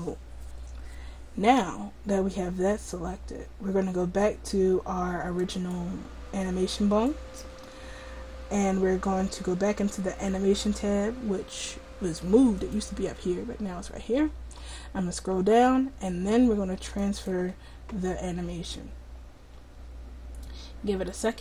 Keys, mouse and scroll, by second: 5.4-9.0 drag, 12.6-14.2 drag, 14.2 middle click, 14.2-15.2 scroll down 1, 17.0-21.4 drag.